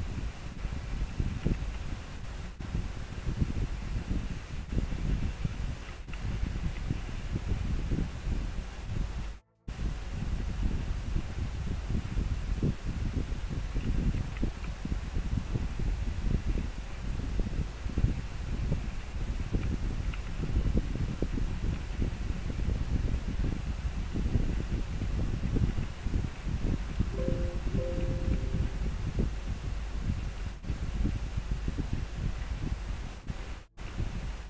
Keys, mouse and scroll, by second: 3.2 scroll down 1, 5.6 scroll up 1, 14.3 scroll down 1, 25.2 scroll down 1, 33.4 scroll down 1.